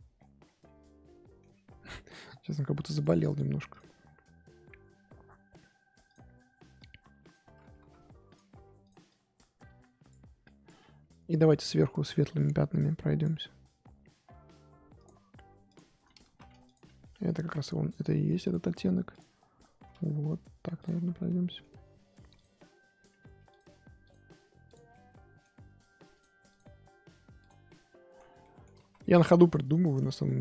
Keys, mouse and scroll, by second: 0.1 scroll down 5, 0.2 scroll up 1, 0.4 scroll down 1, 0.6 middle click, 1.5-2.4 scroll up 9, 2.4-2.9 scroll down 1, 2.9-4.0 drag, 4.0 scroll down 4, 6.1 click, 6.3-6.7 scroll up 4, 6.7-7.8 drag, 7.8 ctrl+z, 8.3 click, 8.5 f, 9.1-15.0 drag, 15.6 click, 16.2 ctrl+z, 16.6 click, 17.0 middle click, 17.4 ctrl+z, 18.5 click, 19.1-21.2 drag, 21.2-22.3 middle drag, 22.3 click, 23.1 f, 24.0 click, 24.8 scroll down 1, 24.9-26.1 middle drag, 26.1-27.6 drag, 27.6-28.8 middle drag, 28.8 ctrl+z, 29.0-29.6 scroll up 1, 29.6 click, 30.0 shift+middle click.